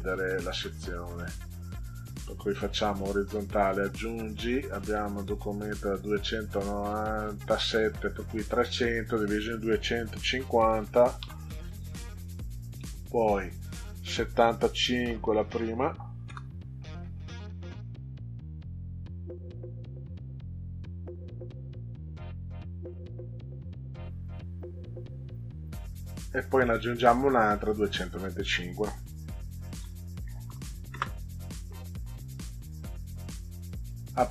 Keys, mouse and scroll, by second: 2.6 click, 10.2 1, 10.6 5, 11.2 0, 12.4 click, 15.0 7, 15.4 5, 16.2 Return, 27.6 click, 29.6 2, 29.8 2, 30.4 5, 30.8 Return.